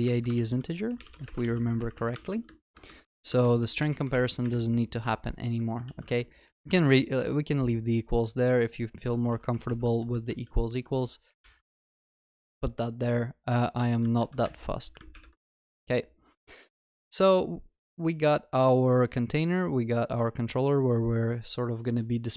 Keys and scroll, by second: 0.3 ctrl+w, 1.4 ctrl+s, 5.9 ctrl+s, 6.7 Delete, 10.0 ctrl+z, 11.4 ctrl+s, 14.2 ctrl+y, 15.6 ctrl+s.